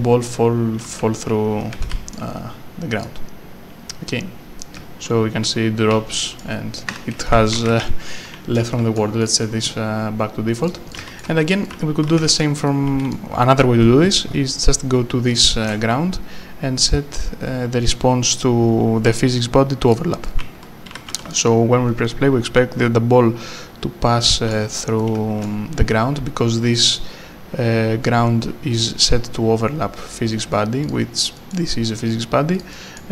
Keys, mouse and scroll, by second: 1.4 q, 2.1 s, 3.0 click, 4.6 right click, 4.8 w, 6.9 Escape, 7.1-8.9 typing, 8.6 scroll up 1, 8.7 right click, 9.2 click, 10.6 click, 10.7-12.8 typing, 11.5 click, 11.6 right click, 12.7 right click, 15.3 right click, 15.7 w, 19.9 click, 24.4 right click, 25.4 w, 30.8 click, 31.4 right click, 32.7 click, 33.0 right click.